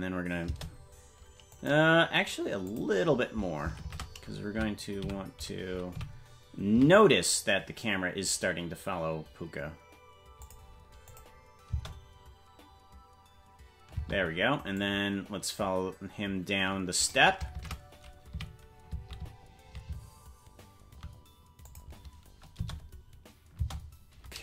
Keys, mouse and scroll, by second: 1.5 click, 1.5 space, 2.6 click, 3.8 shift+`, 11.1 click, 11.7 space, 14.8-17.1 drag, 17.5 shift+`, 22.5 space.